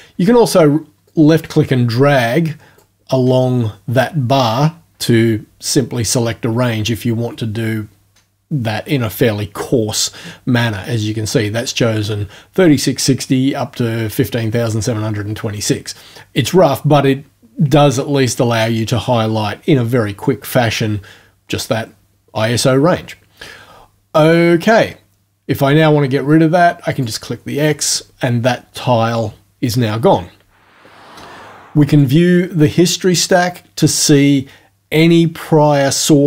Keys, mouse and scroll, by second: 1.1-2.9 drag, 26.9 click, 31.9 click.